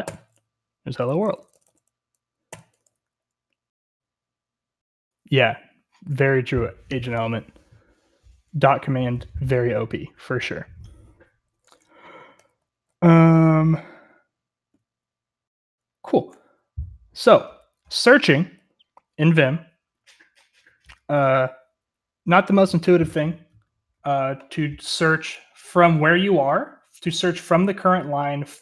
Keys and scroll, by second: 0.0 typing, 1.5-2.3 typing, 3.3 typing, 12.1-13.5 typing, 16.8-17.5 j, 17.9-18.5 k, 18.3 k, 25.1-25.5 typing.